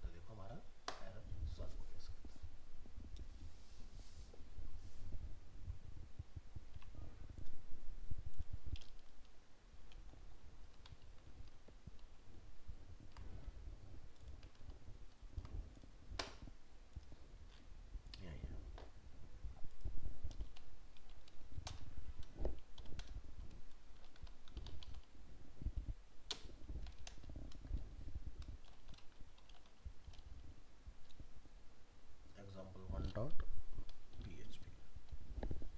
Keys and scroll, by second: 6.7 alt+Tab, 11.0 ctrl+s, 11.4 ctrl+w, 12.0 ctrl+s, 12.6 ctrl+w, 14.6 ctrl+s, 15.0 ctrl+w.